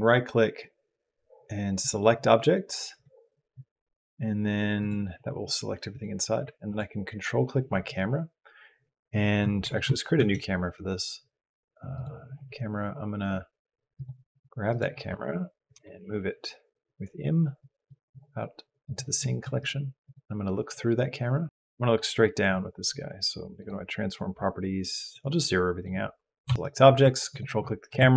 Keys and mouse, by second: 6.5 ctrl+click, 10.0 shift+a, 13.7 click, 15.5 m, 18.6 click, 19.4 click, 19.8 click, 25.0-26.3 drag, 27.1 ctrl+click.